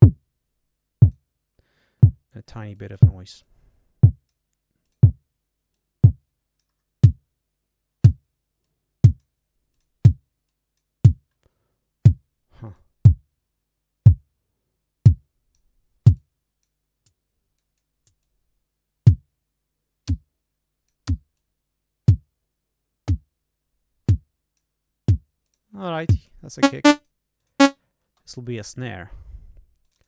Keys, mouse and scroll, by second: 2.7 click, 3.3-4.4 drag, 4.8 click, 5.6-6.7 drag, 8.5 click, 9.7 click, 10.4 click, 14.4-15.7 drag, 16.1 click, 17.5 click, 18.1 click, 19.0-21.0 drag, 24.1 click, 25.4 click, 26.5 click, 26.9 click, 27.3 click, 28.0 space, 29.8 click.